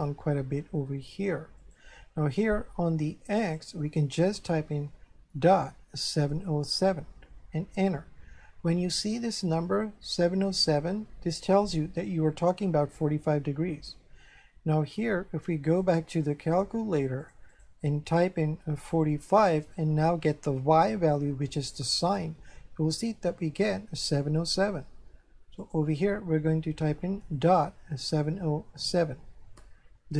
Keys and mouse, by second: 1.6 click, 3.4 click, 5.4 KP_Decimal, 6.2 KP_7, 6.4 KP_0, 6.7 KP_7, 15.7 click, 17.2 click, 18.8 click, 22.1 click, 24.0 click, 25.6 click, 27.3 KP_Decimal, 28.0 KP_7, 28.3 KP_0, 28.8 KP_7.